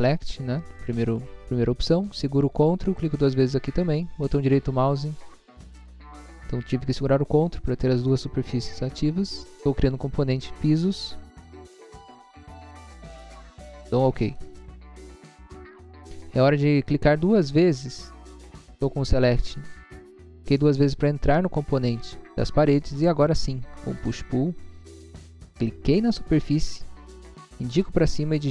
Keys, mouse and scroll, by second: 4.2 right click, 7.3 click, 11.6-12.3 typing, 14.3 click, 17.1 click, 17.3 click, 21.3 middle click, 21.8 middle click, 22.1 middle click, 22.5 middle click, 22.5 scroll down 1, 23.9 click, 25.9 click.